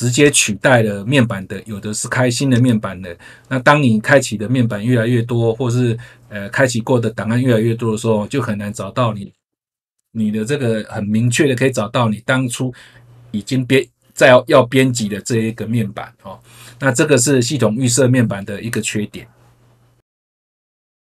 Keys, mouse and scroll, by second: 0.1 click, 2.4 click, 19.9 F3.